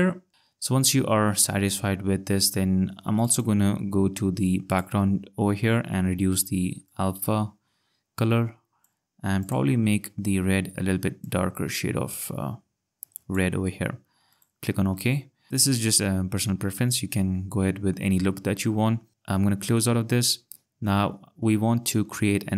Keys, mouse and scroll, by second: 4.1-4.7 scroll, 6.9 click, 9.4 click, 14.3 click, 15.2 ctrl+scroll, 16.3-17.1 scroll, 19.1 click.